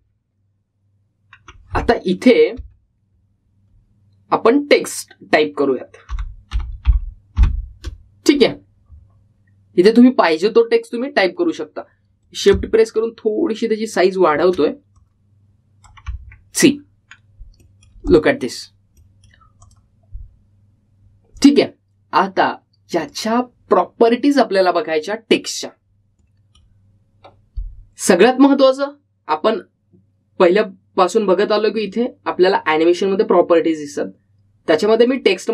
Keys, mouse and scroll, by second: 1.1-1.9 alt+scroll down 1, 7.0-9.0 typing, 11.0 click, 13.4-16.0 drag, 16.0-17.7 drag, 17.7-18.2 scroll up 1, 18.7 middle click, 19.2 click, 20.0 middle click, 20.7 click, 26.0-27.4 scroll up 1, 27.4-30.1 middle drag, 33.0 click, 34.8-35.5 typing.